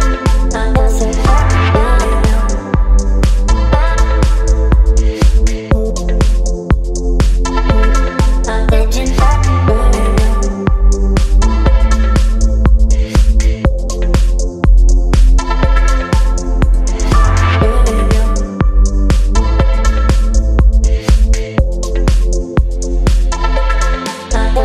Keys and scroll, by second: 0.6 o, 1.0 f, 1.4 ctrl+a, 3.6 v, 4.1 space, 9.2 space, 12.4-15.9 typing, 15.9 ctrl+a, 23.9 KP_9, 24.0 KP_0, 24.1 Return.